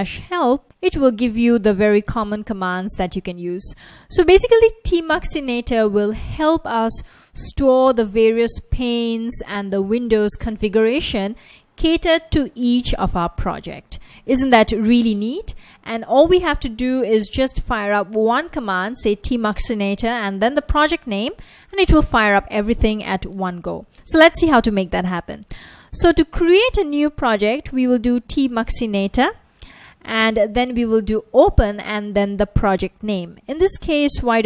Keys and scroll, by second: 0.0-0.5 typing, 1.5 F1, 14.3 typing, 26.6-31.8 typing, 34.1-34.4 typing.